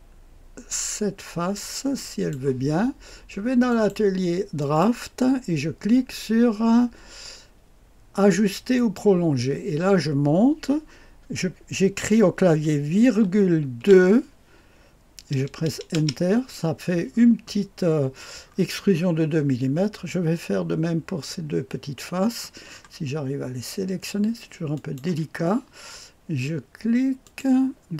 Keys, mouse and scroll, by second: 1.9 click, 3.6 click, 4.5 click, 5.1-9.7 drag, 13.0 ,, 13.7 KP_2, 15.9 Return, 18.4-19.3 scroll up 1, 19.3-22.1 scroll down 1, 22.6-24.7 scroll up 1, 24.7 click, 27.2 click.